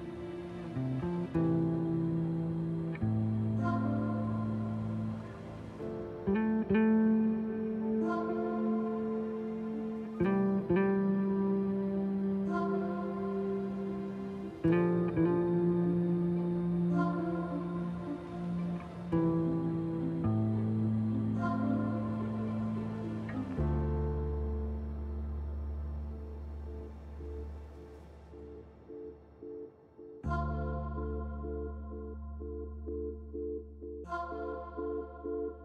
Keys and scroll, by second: 1.8 F4, 2.8 F4, 6.3 s, 10.6 f, 12.1-13.0 typing, 15.5 F4, 16.6 Delete, 21.5-22.4 typing, 23.5 t, 25.7 f, 27.6 f, 28.2 ctrl+z, 28.9 ctrl+z, 29.6-30.6 typing, 34.1 s.